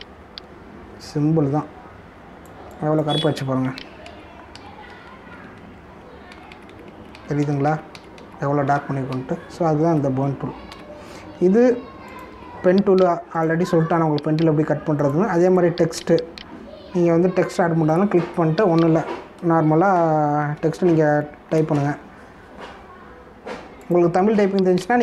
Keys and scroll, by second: 5.0 ctrl+z, 7.3 ctrl+alt+z, 10.5 space, 11.7 v, 21.4 shift+d, 21.5 shift+e, 22.5 BackSpace.